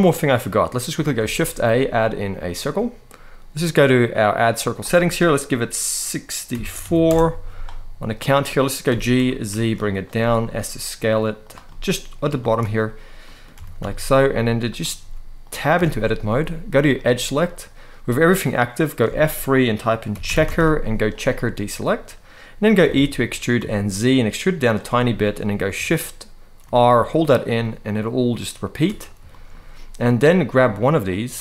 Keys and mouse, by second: 0.9 shift+a, 4.3-6.8 drag, 8.6 g, 9.0 z, 9.6 click, 9.9 s, 11.1 click, 11.4 middle click, 12.1 shift+middle click, 12.9 middle click, 13.2 g, 13.5 z, 14.4 click, 14.7 s, 15.5 Tab, 18.8 F3, 22.5 e, 23.3 z, 24.3 click, 24.7 middle click, 26.3 shift+r, 26.9-28.6 shift+r, 29.0 shift+middle click.